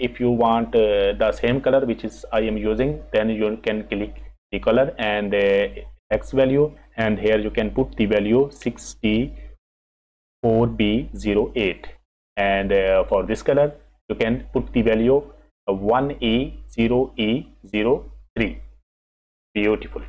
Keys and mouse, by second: 4.0 click, 13.4 click, 18.9 click.